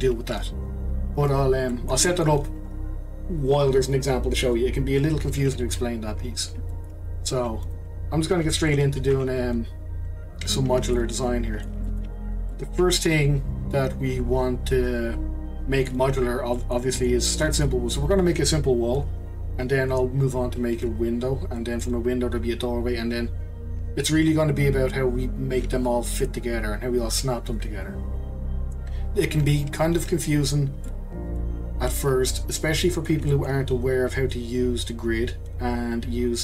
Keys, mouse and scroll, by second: 0.1 scroll up 1, 1.7-5.2 middle drag, 6.0 scroll down 2, 6.3-6.7 scroll up 1, 6.7-7.6 shift+middle drag, 7.6 click, 8.7 middle click, 9.1 Delete, 10.0-10.9 scroll down 2, 10.9-12.2 middle drag, 12.2 scroll up 1, 12.5-15.5 middle drag, 16.6-20.4 middle drag, 21.6-24.7 middle drag, 30.8-36.3 middle drag.